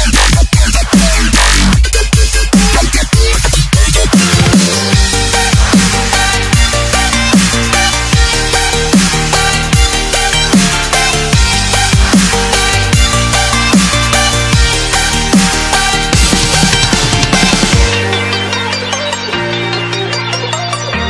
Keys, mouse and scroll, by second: 1.7 alt+Tab, 2.4 click, 2.9 ctrl+c, 3.2 Tab, 3.6 v, 4.2 click, 8.6 t, 9.0 click, 9.6 Return, 10.0 click, 11.2 KP_Add, 11.3-12.6 typing, 12.7 Return, 13.1 KP_Add, 13.8-15.0 typing, 15.7 click, 19.3 c, 19.4 alt+Tab, 20.2 v, 20.7 click.